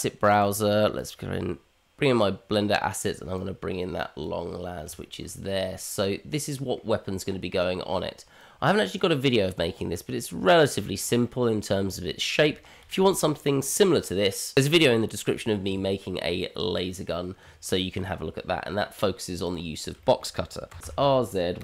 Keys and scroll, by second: 20.7 r.